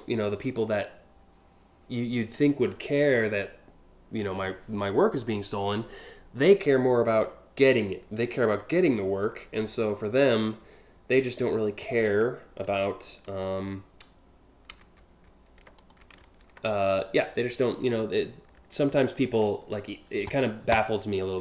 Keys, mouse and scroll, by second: 9.7-11.5 drag, 12.3 ctrl+z, 15.4 click, 16.4 click, 16.8 ctrl+alt+z.